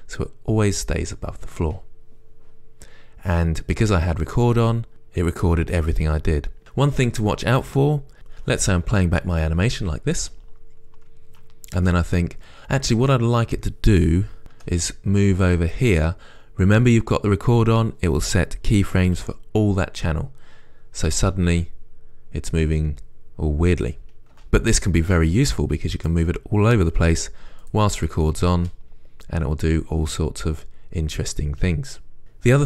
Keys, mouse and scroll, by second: 5.0-21.4 right drag, 12.0 space, 14.9 g, 15.8 g, 21.4 space, 24.6 space, 25.8-28.1 right drag, 27.3 g, 27.9 g, 28.1 click, 28.8 space, 32.2-32.6 drag.